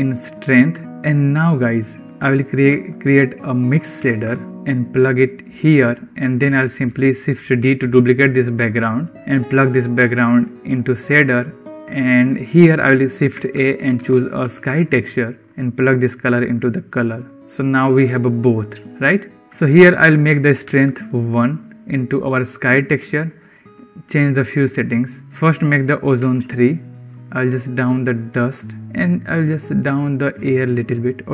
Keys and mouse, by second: 0.9 click, 1.9 click, 2.5 shift+a, 6.2 click, 7.5 shift+d, 9.2-10.7 drag, 11.2 click, 12.3 middle click, 13.2 shift+a, 15.7-16.5 drag, 17.0 click, 18.3 click, 19.3 click, 20.0-21.1 drag, 21.7 click, 23.6 click, 25.3-26.3 drag, 26.9-28.4 drag, 28.8 click, 29.7 click.